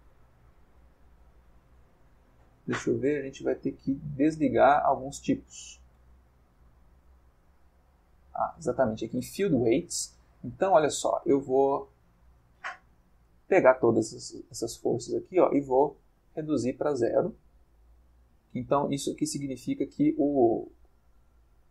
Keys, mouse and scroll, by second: 0.1 click, 0.6-2.0 middle drag, 4.4 click, 6.9 click, 7.8-9.2 middle drag, 14.7-19.6 drag.